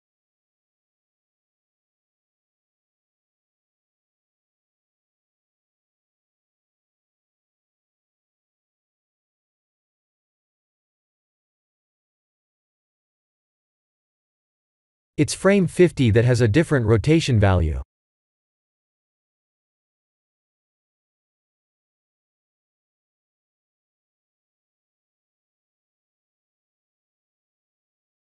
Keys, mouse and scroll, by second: 1.2 click, 1.8 click, 23.7 click.